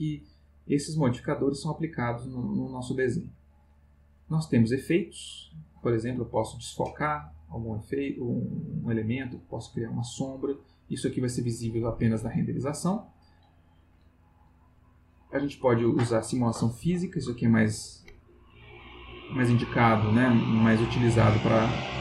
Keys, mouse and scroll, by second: 2.3 click, 3.9 click, 4.7 click, 6.0 click, 7.7 click, 8.2-12.8 drag, 13.7 click.